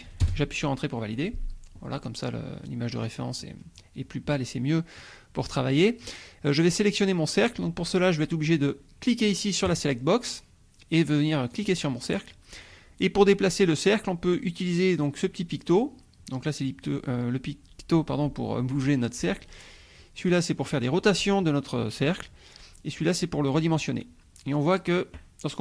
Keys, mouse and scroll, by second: 0.3 Return, 2.9-3.5 scroll up 1, 5.4 click, 9.7 click, 11.7-14.0 drag.